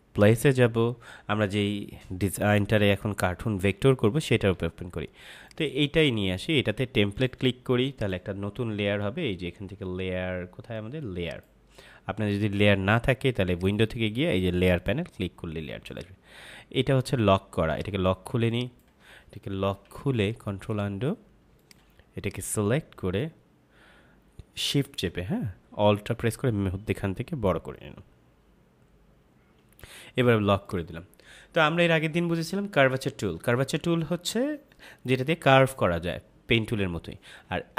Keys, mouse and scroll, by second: 2.9-5.1 scroll down 1, 5.4 click, 11.2 click, 21.5 click, 26.2 alt+shift+click, 30.6 click.